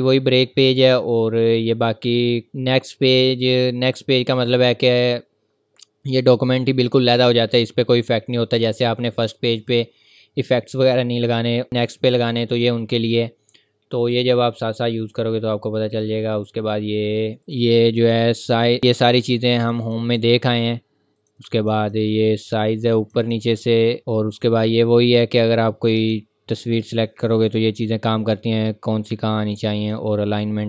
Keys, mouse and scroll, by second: 14.0 click, 17.4 click, 25.5-26.0 scroll up 1, 26.0 click, 29.8 click.